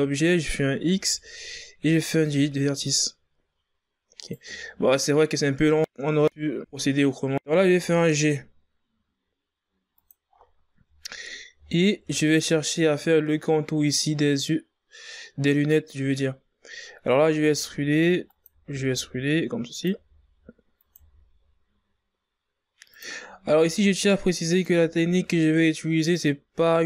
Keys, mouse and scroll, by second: 0.6 x, 4.0 right click, 7.0 shift+scroll up 5, 7.1 g, 10.1 scroll up 7, 10.7 scroll down 4, 11.4 shift+scroll up 3, 12.0 ctrl+scroll down 3, 16.9 e, 18.2 e, 20.7 e, 23.2 e, 24.4 e, 26.4 e.